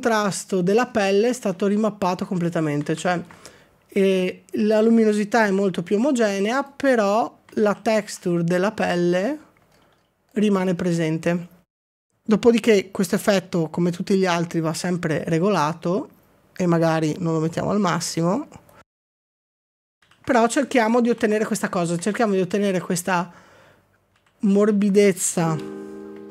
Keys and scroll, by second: 7.6 ctrl+d, 19.9 ctrl+d, 20.0 ctrl+d, 20.7 ctrl+d, 21.2 ctrl+d, 22.1 ctrl+d, 22.7 ctrl+d, 24.2 ctrl+d, 25.6 f.